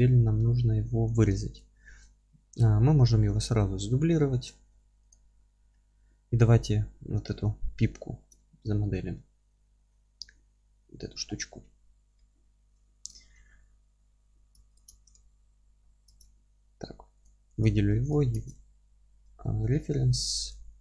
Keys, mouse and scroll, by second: 1.6 click, 2.0-5.1 middle drag, 4.3 shift+d, 5.1 click, 5.6-6.3 scroll up 2, 5.7-9.7 middle drag, 8.1 scroll down 1, 10.0-14.7 middle drag, 11.2-11.6 scroll down 3, 12.0-12.8 scroll up 4, 12.8 z, 13.4-14.0 scroll down 1, 14.7-17.2 ctrl+drag, 15.1 alt+q, 15.8-16.1 scroll down 1, 16.1 alt+q, 16.5-17.0 scroll down 1, 18.0-20.2 ctrl+drag, 18.5 alt+q, 19.4-20.0 scroll down 2, 19.6 alt+q, 20.2-20.8 alt+middle drag.